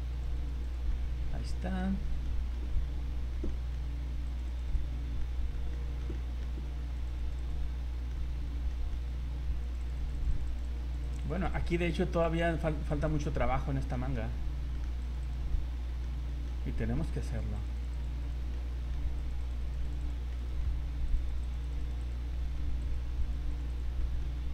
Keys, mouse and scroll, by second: 0.1 click, 0.3 click, 0.6 click, 0.9-1.4 scroll down 4, 2.2 shift+middle click, 2.8 middle click, 3.1 middle click, 3.2 shift+middle click, 3.5 middle click, 3.5 shift+middle click, 3.9 scroll up 2, 4.2 click, 4.5 click, 4.7 click, 4.9 scroll down 1, 5.7 middle click, 6.1 shift+middle click, 6.2 shift+middle click, 6.6 scroll up 2, 6.9 click, 7.2 click, 7.4 click, 7.7 scroll down 2, 8.1 middle click, 8.7 shift+middle click, 9.1-9.4 scroll up 3, 9.6 click, 9.8 click, 10.0 click, 10.2 click, 10.4 click, 10.5 click, 10.7 click, 11.0 click, 11.3 click, 11.4 click, 11.5 click, 11.7 click, 11.9 click, 12.5 click, 12.7 click, 12.9 click, 13.4-13.7 scroll down 8, 13.9 shift+middle click, 14.3 scroll up 3, 14.7 middle click, 15.0 click, 15.2 click, 15.5 middle click, 16.3 shift+middle click, 16.6 scroll up 2, 17.3 click, 17.5 click, 17.8 click, 18.0 click, 18.2 click, 18.5 middle click, 19.2 click, 19.4 click, 19.7 click, 19.9 click, 20.0 click, 20.3 shift+middle click, 21.1 click, 21.4 click, 21.6 click, 21.8 click, 22.0 click, 22.3 shift+middle click, 22.8 click, 23.2 click, 23.5 click, 23.7 click, 24.0 shift+middle click.